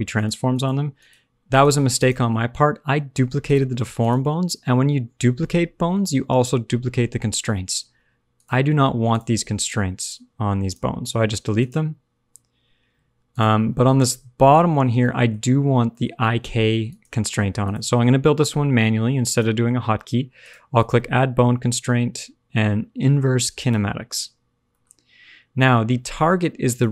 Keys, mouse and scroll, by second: 0.1 click, 0.5 click, 0.9 click, 1.4 click, 1.9 click, 3.4 click, 3.9 click, 6.9 click, 8.3 click, 9.0 click, 9.9 click, 10.6 click, 11.5 click, 13.3 click, 14.9 middle click, 15.9 middle click, 16.8 click, 19.2 click, 20.7 click, 24.6 shift+middle click, 24.9-26.6 scroll up 1, 26.6 click.